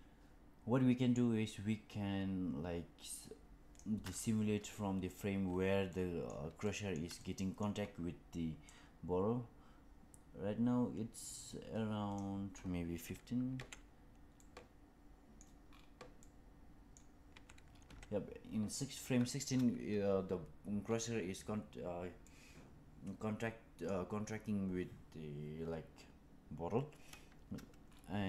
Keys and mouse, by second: 5.8-6.2 middle drag, 6.5-6.8 shift+middle drag, 7.1 middle click, 8.6 click, 13.5 Right, 14.3-15.3 middle drag, 16.1-16.9 middle drag, 17.2 Right, 17.7 Left, 22.2-23.8 middle drag.